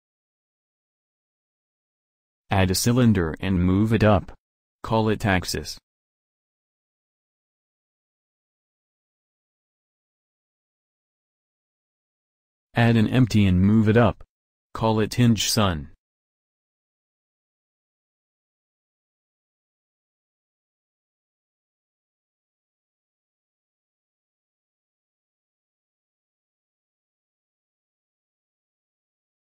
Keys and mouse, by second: 2.5 shift+a, 5.8 s, 7.2 g, 8.8 click, 14.0 shift+a, 18.7 s, 20.5 g, 22.9 middle click, 23.3 click, 24.7-26.5 middle drag.